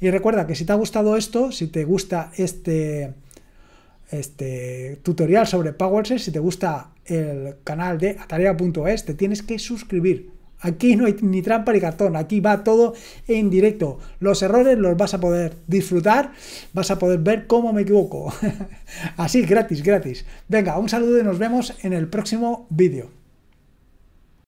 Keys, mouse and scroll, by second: 24.3 click.